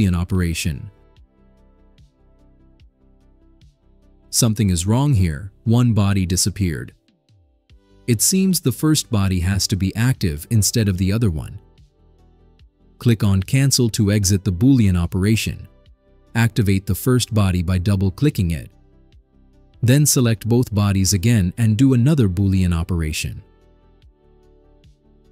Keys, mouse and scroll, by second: 3.2 click, 10.5 click, 11.8 click, 13.6 click, 15.5 click, 16.1 click, 16.6 click, 16.7 click, 17.2 click, 19.6 click, 21.0 ctrl+click, 22.0 ctrl+click.